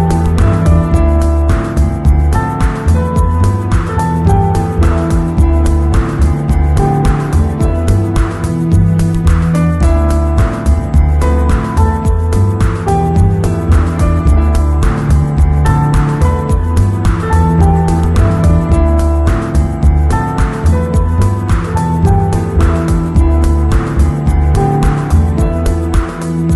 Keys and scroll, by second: 0.6 super+=, 1.2-2.2 typing, 5.7 super+-.